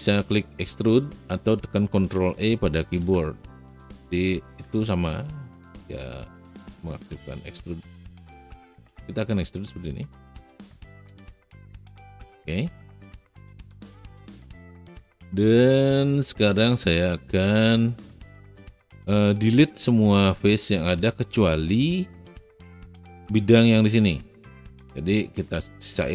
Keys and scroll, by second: 2.8 ctrl+e.